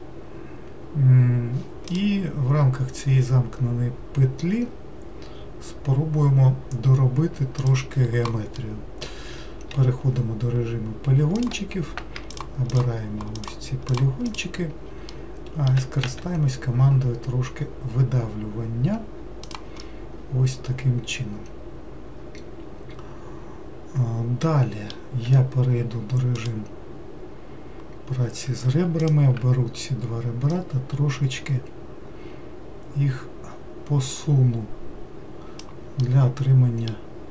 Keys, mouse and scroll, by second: 8.6-9.7 middle drag, 9.7 3, 11.4 click, 12.3 shift+click, 12.7 shift+click, 13.3 shift+click, 13.9 shift+click, 14.3 shift+click, 15.1 middle click, 16.1 e, 19.8-22.9 middle drag, 25.2 2, 26.4 click, 29.0 ctrl+click, 30.5-33.5 drag, 36.0-37.3 middle drag.